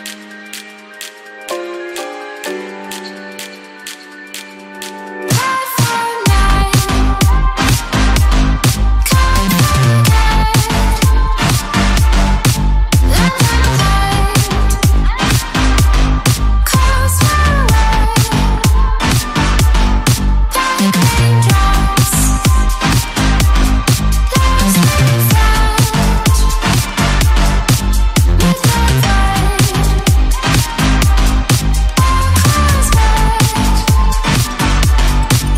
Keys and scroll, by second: 21.7 ].